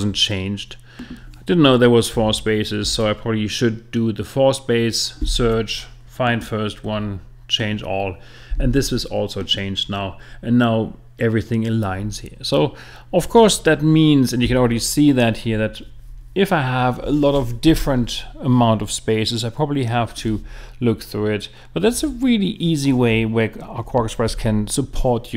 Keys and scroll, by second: 2.8 BackSpace.